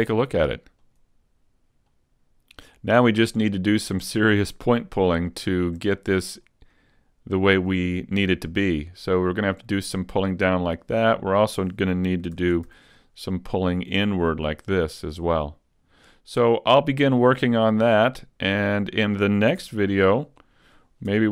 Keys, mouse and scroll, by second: 1.1 click, 5.2 right click, 6.4 click, 8.3 right click, 9.0 click, 10.2-10.6 scroll up 2, 11.2 right click, 12.4 ctrl+Tab, 13.4 right click, 14.1 click, 16.0 right click, 18.0 click, 19.2-19.5 scroll down 2, 19.6 a, 20.0-20.6 scroll down 2, 20.4 middle click, 21.1 Tab.